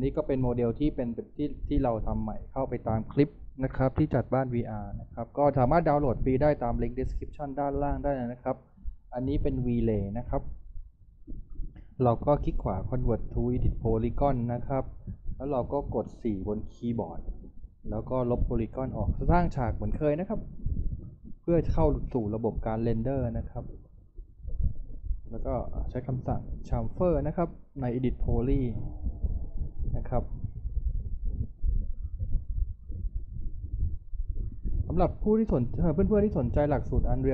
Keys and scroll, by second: 1.3 t, 8.1 f, 17.3 4, 20.7 Delete, 25.8 e, 36.4 6.